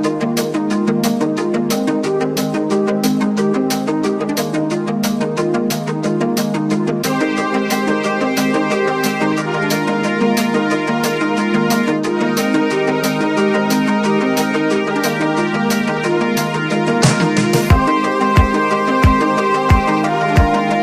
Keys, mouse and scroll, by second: 0.1 click, 1.9 click, 2.3 click, 3.7-6.2 drag, 6.6-9.0 drag, 9.1 click, 12.6 click, 14.1 click, 15.5-20.8 drag.